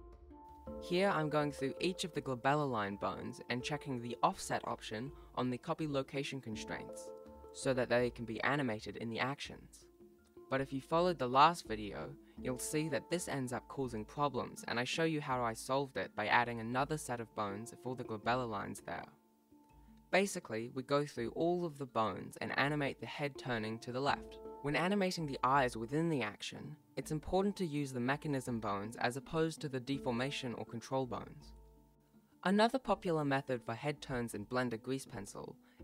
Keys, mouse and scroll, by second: 2.2 click, 3.9 right click, 4.3 right click, 7.6 click, 9.1 click, 11.0 right click, 13.2 click, 14.5 click, 16.4 right click, 18.5 click, 19.6 click, 19.7 right click, 20.0 click, 20.3 shift+right click, 20.4 shift+right click, 20.8 i, 21.4 click, 21.7 scroll up 1, 21.9 g, 22.1 right click, 22.2 shift+right click, 22.5 shift+right click, 22.6 g, 23.2 right click, 23.4 shift+right click, 23.7 shift+right click, 24.1 i, 24.2 a, 24.3 y, 24.4 t, 24.6 click, 25.3 ctrl+s, 25.4 click, 25.5-26.0 scroll down 4, 25.6 shift+middle click, 25.9 ctrl+s, 26.2 click, 26.6 click, 27.0 right click, 27.2 right click, 27.2 g, 27.5 a, 28.0 right click, 28.3 Left, 28.7 i, 29.1 right click, 29.3 i, 29.6 right click, 29.9 i, 30.6 right click, 31.2 click, 31.6 g, 33.3-35.8 typing, 33.6 right click, 35.0 right click, 35.6 ctrl+z.